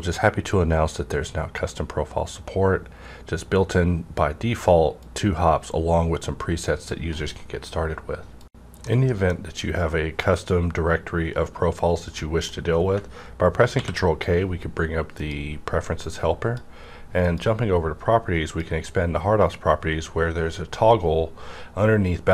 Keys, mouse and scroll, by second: 5.0 click, 5.0 scroll up 1, 12.1 middle click, 12.2-15.2 middle drag, 12.2 click, 13.7 ctrl+k, 15.1 click, 15.2 click, 16.0-18.4 drag.